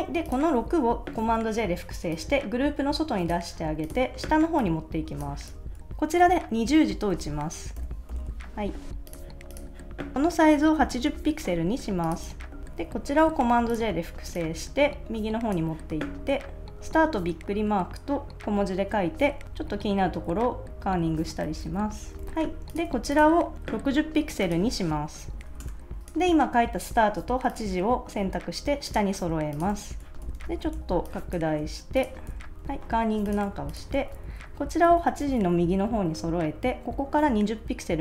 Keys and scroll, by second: 1.2 super+j, 5.5 super+s, 6.7-8.1 typing, 10.7 8, 11.0 Return, 12.2 super+s, 13.2 super+j, 16.7 shift+1, 18.3 Left, 19.4 alt+Right, 20.7 alt+Right, 21.1 Left, 21.5 alt+Right, 21.7 alt+Left, 22.3 Right, 22.9 super+s, 25.3 6, 25.6 Return, 25.6 0, 29.7 super+s, 30.7 space, 32.3 super+s, 32.6 alt+Right, 33.4 super+s, 34.2 shift+Left, 34.8 shift+Right, 35.2 Left.